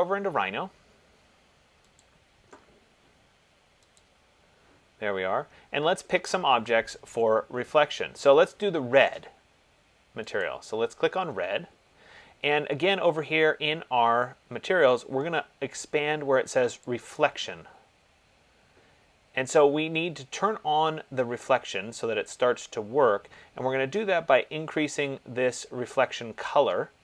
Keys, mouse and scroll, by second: 4.2 click, 10.7 click, 17.3 click.